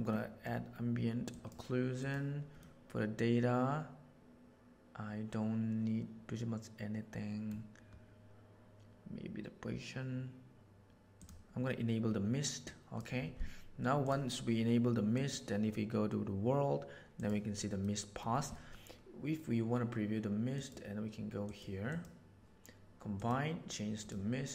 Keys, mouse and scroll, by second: 0.2 middle click, 1.3 click, 1.9 click, 2.6-7.5 middle drag, 11.1 click, 12.6-13.0 drag, 13.9 click, 15.1 drag, 17.1 click, 17.7 middle click, 20.5 right click, 21.4 right click, 21.8-24.2 right drag.